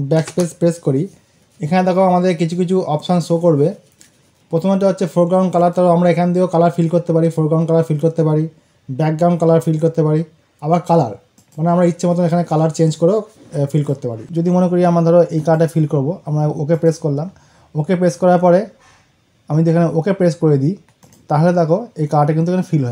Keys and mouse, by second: 5.4 click, 6.6 click, 11.2 click, 13.8 click, 15.2 click, 20.9 click.